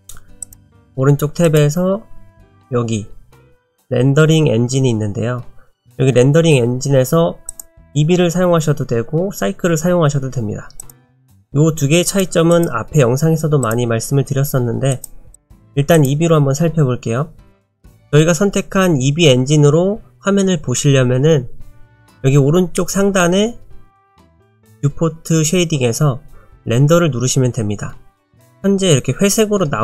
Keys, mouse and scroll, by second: 0.4 click, 7.5 click, 11.2 click, 12.1 click, 14.9 click, 15.4 click.